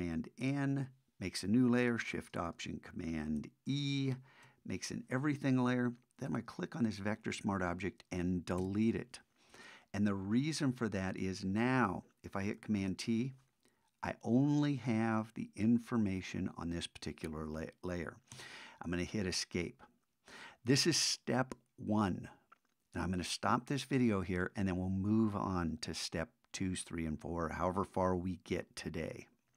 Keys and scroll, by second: 0.4 alt+shift+super+n, 3.1 alt+shift+z, 3.7 alt+shift+super+e, 12.8 super+t.